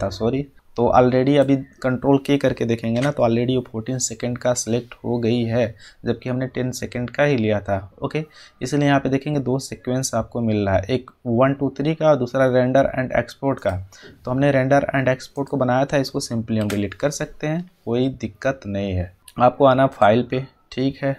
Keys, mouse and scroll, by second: 2.9 ctrl+k, 15.4 click, 16.5 Delete, 19.9 click.